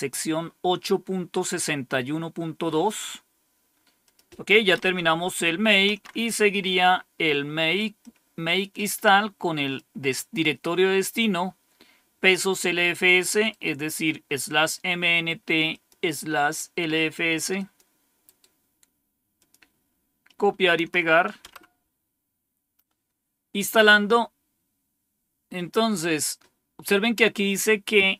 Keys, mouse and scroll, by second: 4.0 click, 4.7 Page_Up, 5.8 Page_Down, 7.9-9.7 drag, 13.2 right click, 15.6 click, 16.2 click, 17.5 click, 18.2 right click, 19.3 click, 20.7 Tab, 21.4 Return.